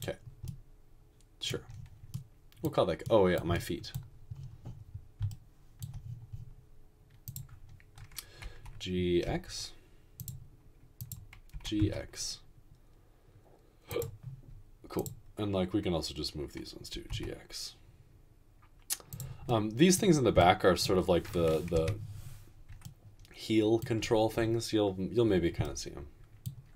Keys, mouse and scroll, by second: 8.6-9.2 typing, 11.5 typing, 17.0 typing, 21.8 ..